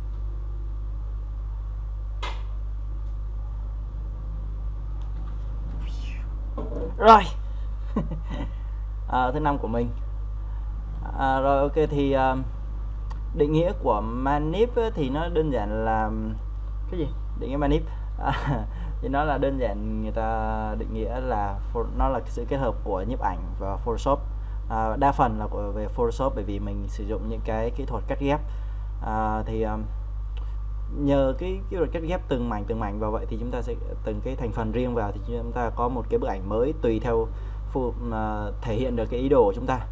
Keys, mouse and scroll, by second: 3.7-39.9 drag.